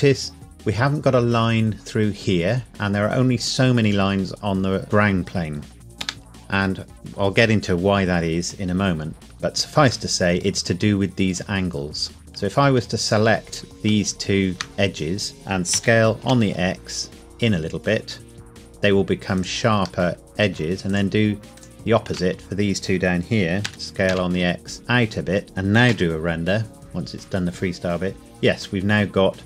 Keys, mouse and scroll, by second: 6.0 Escape, 9.2 click, 9.3 Tab, 10.1 middle click, 12.2 alt+click, 15.7 s, 16.2 x, 19.3 click, 20.1 middle click, 20.9 alt+click, 23.7 s, 24.1 x, 25.4 Tab, 25.9 F12.